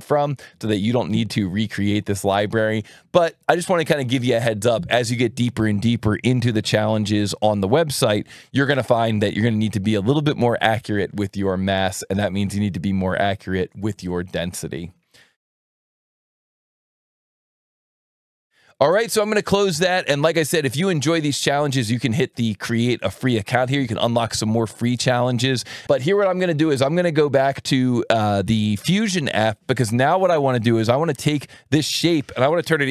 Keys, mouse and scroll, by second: 12.4 alt+1, 19.2 click, 20.9 click, 26.6 click.